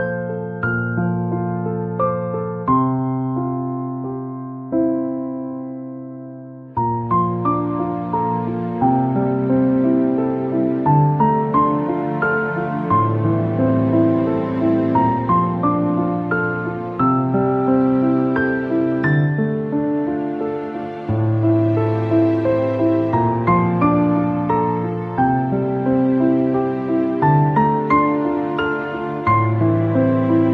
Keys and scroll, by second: 8.4 ctrl+shift+=, 10.3 ctrl+shift+], 13.9 ctrl+-.